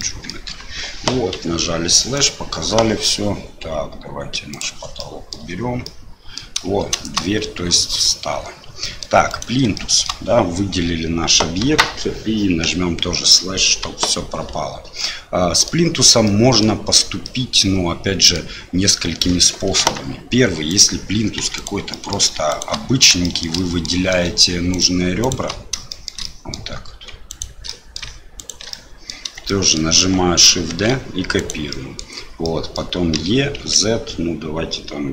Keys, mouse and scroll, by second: 0.0 middle click, 2.1 click, 4.5 click, 5.0 middle click, 5.8 middle click, 8.8 middle click, 9.3 click, 9.7 shift+middle click, 13.9 KP_7, 15.0 middle click, 16.2 middle click, 17.2-18.4 middle drag, 19.8 Tab, 20.7 click, 21.4 2, 21.5 click, 21.9 middle click, 22.5 shift+click, 23.2 shift+middle click, 23.5 middle click, 24.7 shift+click, 25.2 shift+click, 25.9 shift+middle click, 26.2 middle click, 27.3 shift+click, 27.6 middle click, 28.4 shift+click, 28.7 middle click, 29.4 shift+middle click, 30.7 shift+d, 31.8 middle click, 32.5 middle click, 33.1 e.